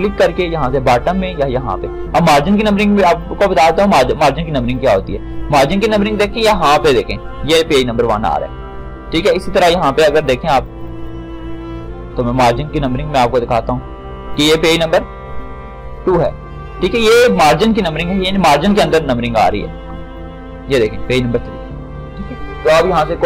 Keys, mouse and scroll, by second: 1.3 click, 3.2 click, 5.3 click, 10.3-17.0 drag, 18.5-23.1 drag.